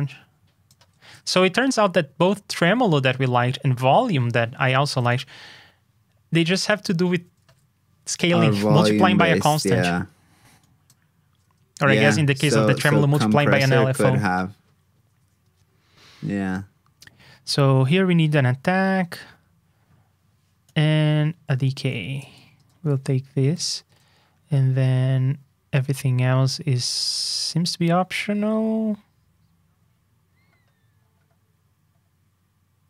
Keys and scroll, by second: 1.3 alt+shift+Down, 7.4 super+v, 8.7 super+Tab, 22.3 super+c, 22.7 super+Tab, 23.5 super+v, 23.8 super+Tab.